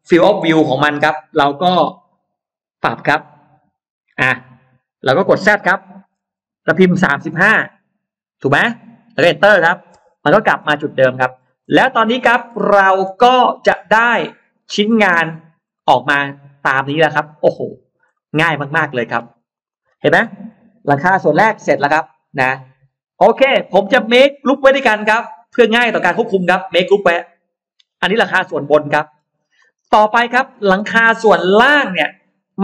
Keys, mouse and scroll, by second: 7.5-9.2 typing, 9.9 Return, 10.7 Return, 10.7 space, 10.9-12.1 scroll up 2, 10.9 space, 11.9 middle click, 12.3 scroll down 1, 12.7 middle click, 13.1-13.7 scroll up 2, 13.9-14.2 scroll down 2, 14.4 click, 15.2 click, 15.6 middle click, 16.6 scroll down 1, 17.3 click, 18.0 middle click, 19.2 click, 19.4 click, 20.0 scroll up 1, 20.5 Delete, 20.7 middle click, 20.9-21.3 scroll up 1, 21.5 middle click, 22.1-23.1 middle drag, 23.1-23.4 scroll down 1, 23.9-25.2 drag, 26.5 right click, 27.6 click, 28.1 click, 28.4 middle click, 29.2-30.0 scroll up 1, 29.8 middle click, 30.4-31.4 scroll down 1, 30.9-32.6 middle drag.